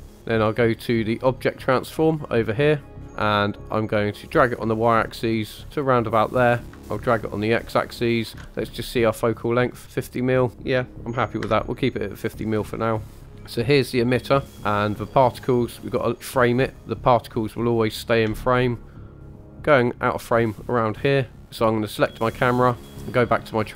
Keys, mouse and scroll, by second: 0.2 scroll down 2, 2.0 click, 3.0-4.0 scroll up 4, 4.0-5.6 drag, 6.7-8.4 ctrl+drag, 9.1 click, 10.5 click, 13.0 click, 16.8 click, 18.3 space, 19.5 space, 21.9 click, 22.9 click.